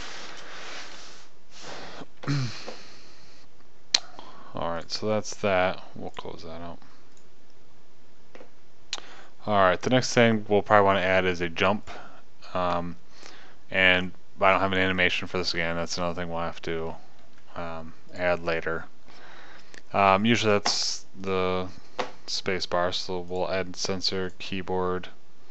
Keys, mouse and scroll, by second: 0.8 KP_0, 8.9 middle click, 21.7 middle click.